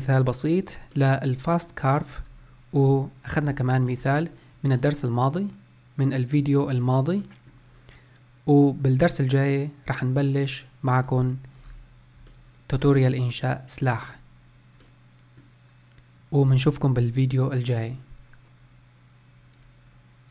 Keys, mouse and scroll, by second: 0.8-2.0 middle drag, 2.0-2.6 scroll down 2, 2.6-3.3 scroll up 3, 3.3-3.7 scroll down 1, 3.7-10.3 shift+middle drag, 11.0 scroll up 3, 11.5 scroll down 4, 12.2-17.9 shift+middle drag.